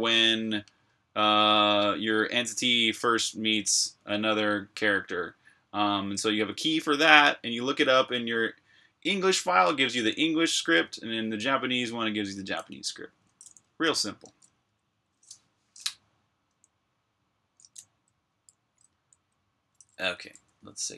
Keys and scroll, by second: 14.1 super+Tab, 16.4 j, 19.7-20.9 typing.